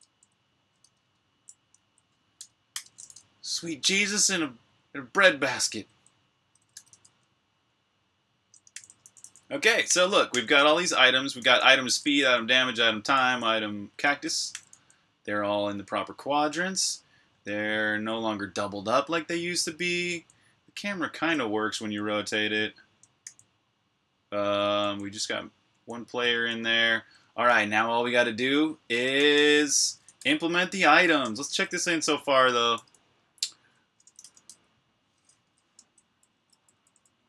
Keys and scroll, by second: 2.6-4.0 typing, 6.6 typing, 8.3-14.5 typing, 17.7 typing, 19.1-21.6 typing, 23.0 j, 25.2-26.1 typing, 28.7-31.4 typing, 33.1-37.2 typing, 35.3 Tab.